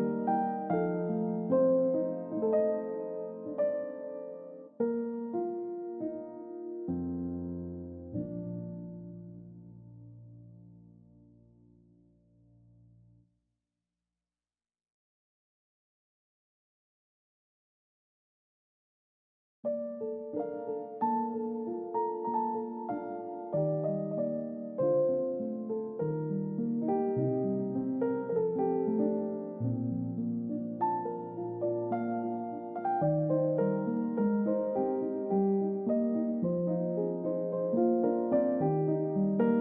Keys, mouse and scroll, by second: 0.2 middle click, 0.5-0.9 scroll up 1, 0.9-2.4 scroll down 1, 3.7 typing, 4.9-5.8 typing, 5.3-5.8 scroll up 1, 7.6 typing, 9.2 double click, 12.8-13.2 scroll up 1, 13.3 double click, 13.5-14.2 scroll down 1, 17.9 scroll up 1, 20.1 scroll down 1, 20.3 scroll up 1, 21.3-21.8 scroll down 1, 22.5 middle click, 22.9 scroll up 1, 24.2 middle click, 26.3-26.8 scroll down 1, 26.8 middle click, 27.2-27.6 scroll up 1, 27.6-29.6 scroll down 1, 31.1 scroll up 1, 31.6 scroll down 1, 31.8 middle click, 33.9 scroll down 1, 34.1 middle click, 34.5 scroll down 1, 34.7 middle click, 36.0 Delete, 38.7 double click, 39.0 scroll up 1.